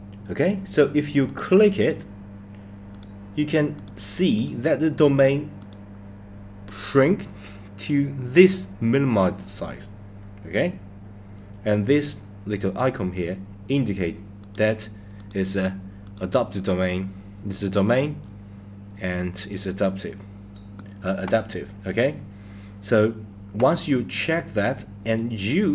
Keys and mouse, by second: 1.4 click, 3.0 click, 3.9 click, 4.5 click, 5.7 click, 14.5 click, 15.3 click, 16.2 click, 16.7 click.